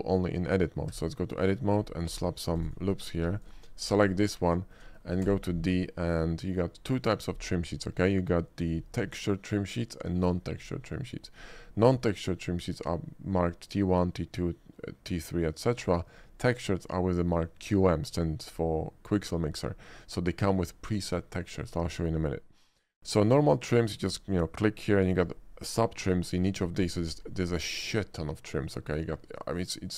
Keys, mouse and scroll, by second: 2.3 ctrl+r, 2.3 middle click, 2.3 scroll up 1, 2.6 click, 3.0 Tab, 4.1 click, 4.7 middle click, 4.9 middle click, 5.3 d, 12.0 click, 23.3 click, 27.5 click, 28.7 click.